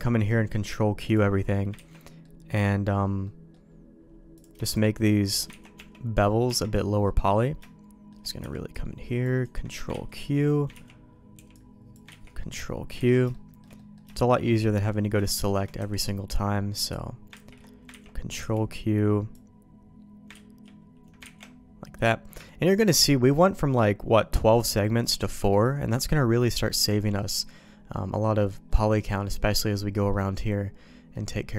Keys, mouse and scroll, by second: 1.1 click, 1.8 ctrl+x, 2.0 middle click, 2.4 middle click, 3.2 middle click, 4.3 click, 4.7 shift+click, 5.2 shift+click, 5.5 ctrl+x, 5.7 Tab, 6.4 Tab, 6.7 middle click, 6.9 click, 7.6 shift+click, 8.4 b, 9.9 ctrl+q, 10.7 ctrl+x, 11.3 b, 12.1 ctrl+q, 13.0 ctrl+x, 13.3 shift+middle click, 13.7 middle click, 14.1 shift+middle click, 15.2 shift+middle click, 15.7 b, 17.3 ctrl+q, 17.9 ctrl+x, 18.4 b, 20.3 ctrl+q, 21.2 ctrl+x, 21.8 middle click, 22.4 shift+middle click, 26.9 middle click, 27.6 middle click, 29.4 middle click, 30.3 middle click.